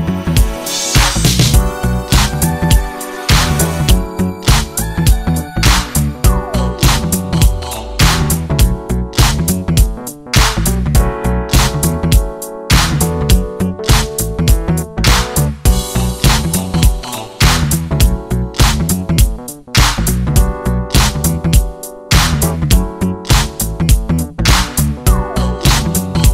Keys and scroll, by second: 13.3 Escape.